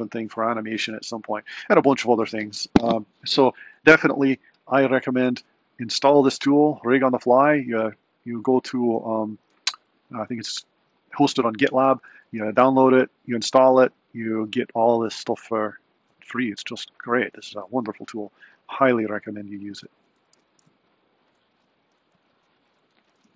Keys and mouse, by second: 20.1 z.